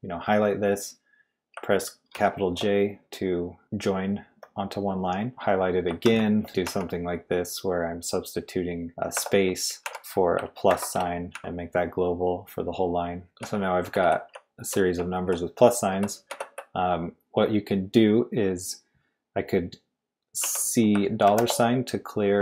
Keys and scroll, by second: 2.1 shift+j, 5.8-7.1 typing, 9.1-11.3 typing, 13.0-16.3 typing, 18.1 typing, 20.4-21.2 typing.